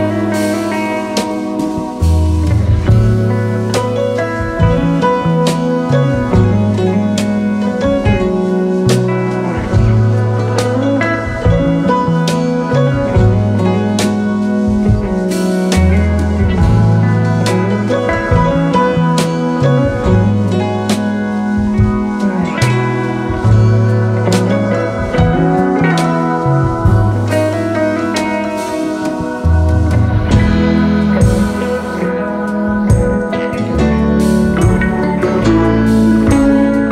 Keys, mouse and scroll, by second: 0.1-2.7 typing, 2.5 alt+scroll down 1, 5.3 alt+scroll up 1, 5.5 alt+click, 6.3 ctrl+0, 9.5 alt+scroll down 1, 9.8 space, 10.3 space, 12.2 ctrl+c, 12.4-14.1 typing, 14.4 alt+scroll down 2, 16.7 alt+scroll up 2, 17.2 space, 18.9 Delete, 19.6-22.1 alt+scroll down 2, 19.9 space, 22.1 typing, 23.4 typing, 25.5-26.5 space, 26.6 double click, 28.6 space, 28.7 double click, 30.6 shift+click, 33.0 double click, 36.0 alt+scroll up 2, 36.3 space.